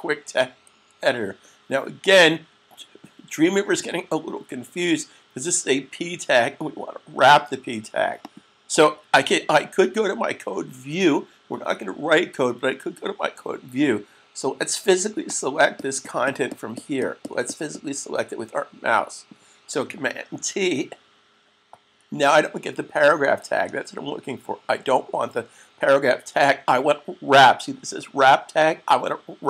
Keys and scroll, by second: 20.2 super+t.